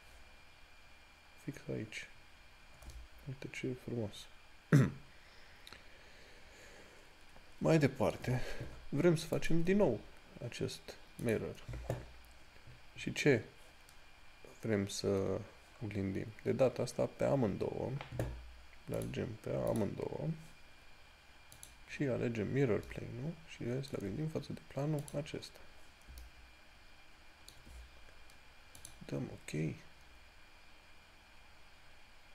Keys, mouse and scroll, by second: 0.0 click, 2.8 scroll down 1, 3.2 shift+middle click, 16.1 scroll up 1, 19.2 click, 23.2 shift+middle click, 25.3 click, 26.5 middle click.